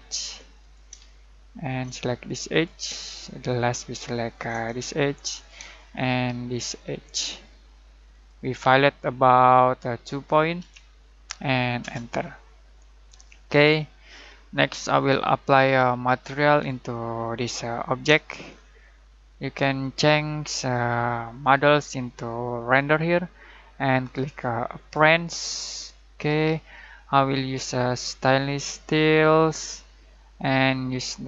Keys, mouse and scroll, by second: 0.6 click, 1.0-1.6 shift+middle drag, 2.5 click, 3.0-4.5 shift+middle drag, 5.3 click, 5.7-6.6 shift+middle drag, 8.2 click, 10.5 2, 11.8 Return, 12.6 scroll down 1, 13.1-14.0 scroll up 1, 14.0-15.6 middle drag, 16.5-18.1 shift+middle drag, 18.2 scroll down 1, 19.0-20.6 middle drag, 21.5 click, 26.6 click, 28.3-31.2 drag.